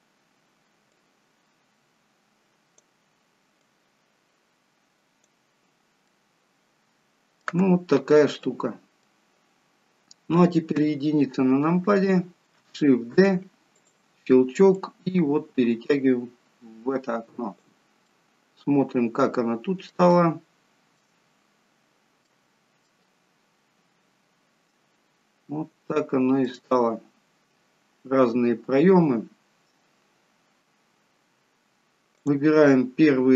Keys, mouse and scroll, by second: 1.0 click, 3.6 click, 5.7-7.7 scroll down 2, 6.2 middle click, 7.7-8.5 scroll up 3, 8.5 middle click, 9.7-10.8 scroll down 1, 10.8 scroll down 1, 10.8 KP_1, 13.3 shift+d, 14.8 click, 18.2 middle click, 20.1 shift+middle click, 21.4-22.4 scroll up 2, 22.4 middle click, 24.1-24.5 scroll down 1, 25.1 scroll down 1, 25.9 shift+middle click, 27.7-28.3 scroll up 1, 32.2 click.